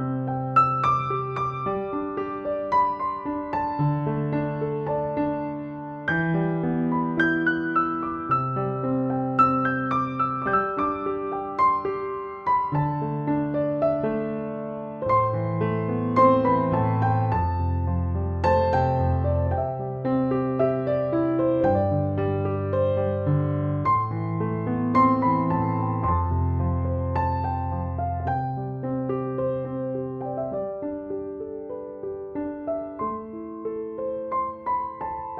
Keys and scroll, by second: 6.2 typing, 22.7 BackSpace, 25.6 typing.